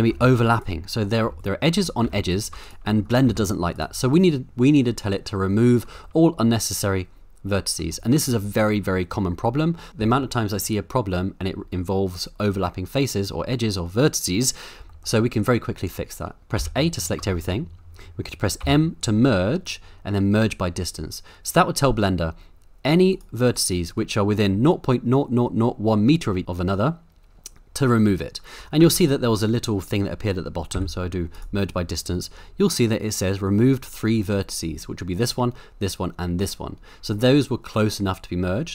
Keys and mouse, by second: 0.0-0.1 typing, 0.5 right click, 1.2 g, 1.4 g, 2.0 g, 2.2 right click, 3.3 g, 3.7-5.9 right drag, 6.0-7.8 middle drag, 14.9 shift+middle click, 16.6 a, 17.4 middle click, 18.6 m, 28.9 ctrl+z, 30.7 m.